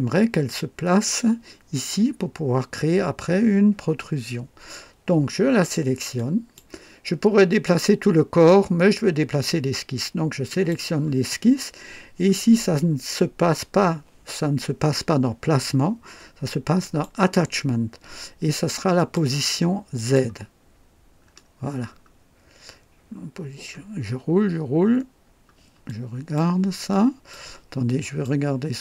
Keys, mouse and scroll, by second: 0.5-1.2 drag, 6.1 click, 10.5 click, 16.8 click, 18.9 click, 19.9 click, 20.7-21.1 scroll down 1, 21.2-22.1 scroll up 3, 23.5-25.2 scroll up 4, 25.9 click, 26.9 click, 27.8-28.4 drag.